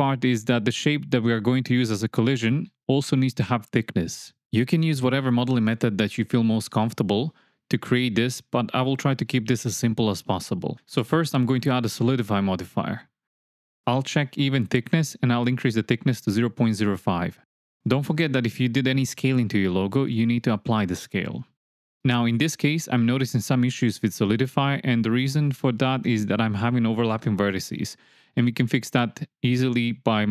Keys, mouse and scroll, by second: 0.6 shift+middle click, 0.8 shift+click, 0.9 shift+middle click, 1.0 shift+click, 11.8-13.1 drag, 13.5 alt+z, 13.8 shift+click, 14.1 shift+middle click, 14.4 ctrl+middle drag, 15.4 click, 16.2-17.3 drag, 19.9-20.8 shift+middle drag, 22.1-22.7 middle drag, 23.5-23.9 shift+middle drag, 24.0 middle click, 25.0 Tab, 26.4 click, 27.4 middle click, 28.0 click, 28.7 click, 29.6 m, 30.2 click.